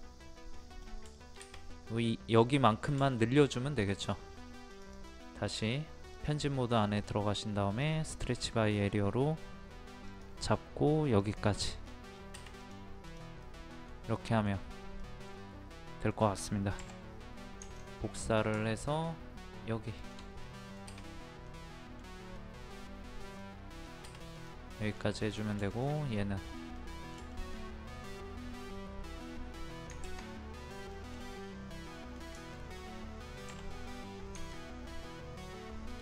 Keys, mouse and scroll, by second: 0.5-1.0 scroll down 1, 1.1 shift+middle click, 1.6-3.0 scroll up 1, 3.0 shift+middle click, 4.7 click, 8.2 middle click, 8.5-10.1 scroll up 1, 10.1 click, 11.8 scroll down 1, 12.2 scroll up 1, 12.6 click, 13.4 middle click, 14.7 scroll up 1, 15.0 middle click, 15.4-15.9 scroll up 1, 15.9 middle click, 17.6 ctrl+click, 19.9 shift+click, 20.4-23.3 middle drag, 23.3 scroll down 1, 24.3 click, 24.7 middle click, 25.2 click, 25.7 shift+click, 26.1 scroll down 1, 26.7 middle click, 27.3 shift+middle click, 30.9 middle click, 33.5 m, 34.4 ctrl+click.